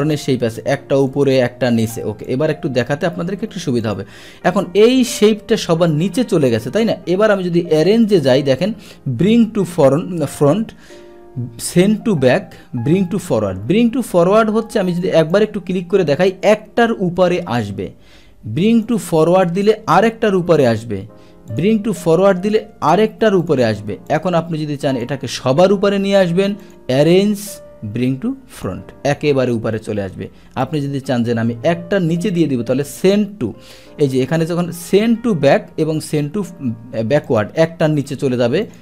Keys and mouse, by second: 1.1 click, 2.2 click, 3.8 click, 7.8 click, 15.3 click, 18.8 click, 19.9 click, 21.5-22.4 drag, 23.4 click, 24.1 click, 24.9 click, 26.6 click, 28.6 click, 30.6 click, 32.3 click, 37.2 click, 38.6 click.